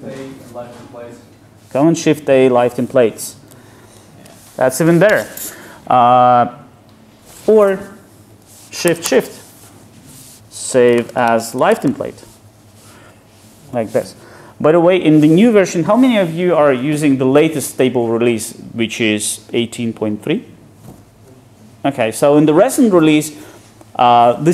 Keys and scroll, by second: 4.0 ctrl+shift+super+a.